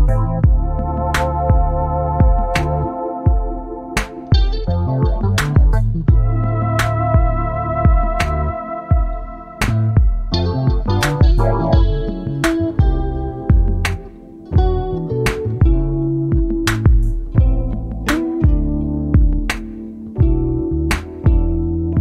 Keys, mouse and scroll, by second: 0.9 click, 1.7 click, 3.2 ctrl+d, 4.5 shift+click, 6.3 ctrl+KP_Multiply, 11.3 KP_5, 12.2 click, 13.9 click, 15.7-17.6 drag, 18.5 click, 19.4 KP_3, 19.5 KP_0, 19.8 KP_Enter, 21.3 click.